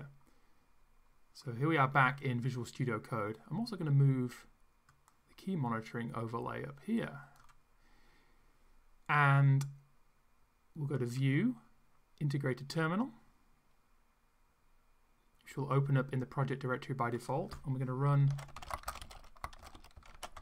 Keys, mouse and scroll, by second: 4.9-7.6 drag, 11.1 click, 12.7 click, 17.1 click, 18.0-20.4 typing.